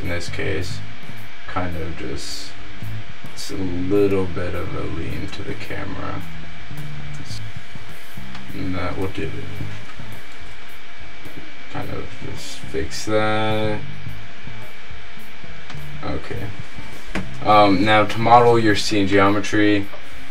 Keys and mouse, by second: 8.6-10.4 middle drag, 10.4 r, 17.3 shift+a, 17.7 click.